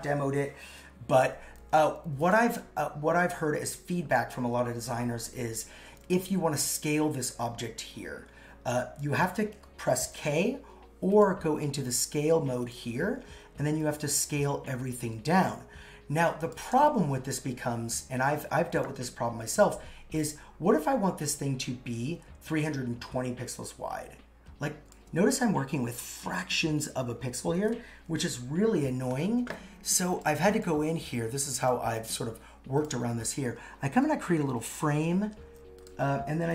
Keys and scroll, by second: 18.9 super+z, 27.5 super+z.